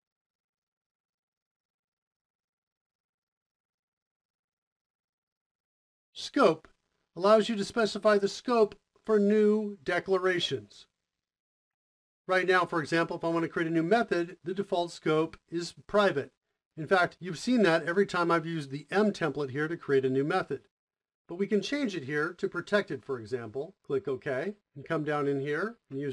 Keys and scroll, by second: 2.1 typing, 16.7 i, 23.5-25.0 typing.